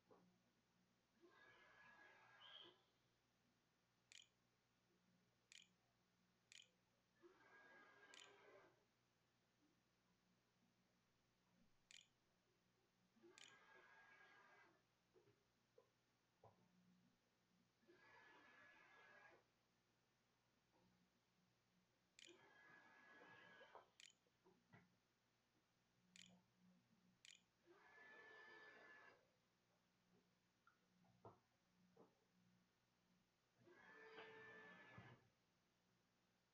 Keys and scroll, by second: 0.8-6.8 typing, 7.9 Tab, 9.9-12.9 typing, 14.0-15.3 typing, 16.6 Delete, 18.9-25.9 typing, 22.0 End, 22.4 Delete, 22.6 Return, 27.0 ctrl+x, 27.4 s.